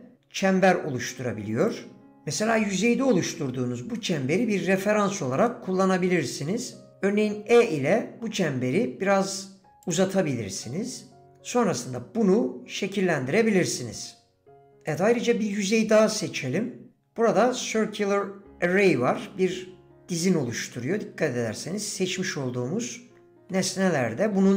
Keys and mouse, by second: 0.4 s, 4.0 middle click, 4.8 shift+middle click, 5.5 middle click, 8.6 e, 14.6-16.4 middle drag, 16.4 d, 20.7-22.7 middle drag.